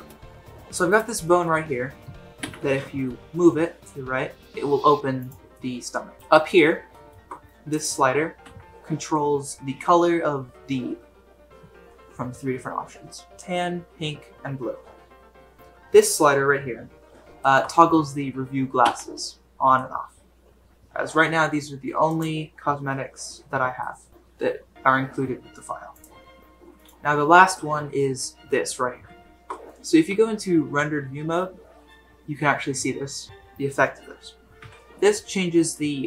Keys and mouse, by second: 1.2 middle click, 2.4 g, 5.5-6.3 middle drag, 6.1 alt+shift+g, 6.9 shift+middle drag, 8.4 g, 15.5 g, 17.4 shift+middle click, 18.8 g, 23.9 shift+middle drag, 24.1 g, 26.8 click, 30.1 z, 34.6 g.